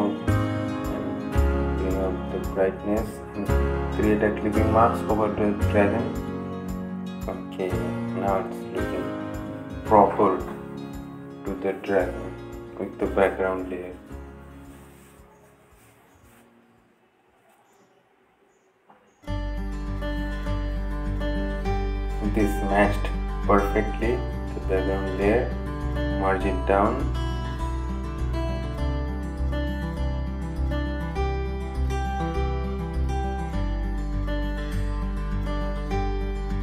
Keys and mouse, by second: 4.1 right click, 9.7-17.5 drag, 21.5-25.0 drag, 28.2 click, 29.1 right click, 32.4 click, 36.5 click.